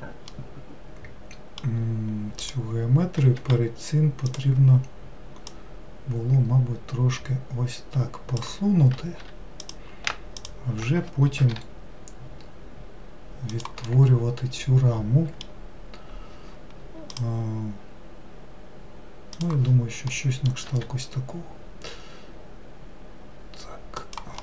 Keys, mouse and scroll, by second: 0.3-2.4 middle drag, 2.4 click, 3.4 2, 4.3 click, 5.5 click, 9.2 3, 9.6 click, 10.4-11.5 shift+drag, 11.5 i, 13.9-17.0 middle drag, 20.1 middle click, 20.7 e.